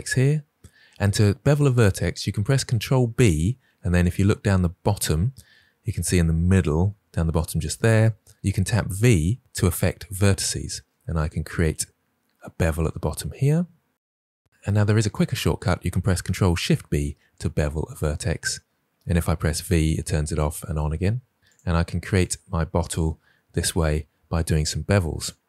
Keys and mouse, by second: 2.7 ctrl+b, 8.9 v, 16.7 ctrl+b, 19.4 v, 20.2 v, 22.0 click, 23.1 ctrl+b.